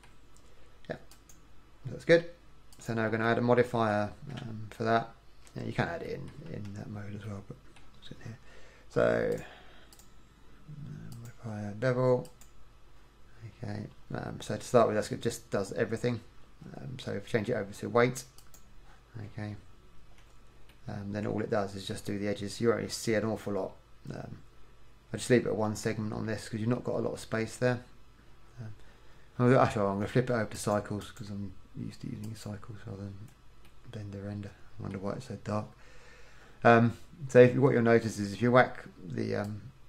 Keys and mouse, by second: 4.6 Tab, 6.7 KP_1, 14.0-18.6 middle drag, 19.4 Tab, 33.8-34.8 middle drag, 36.3 middle click.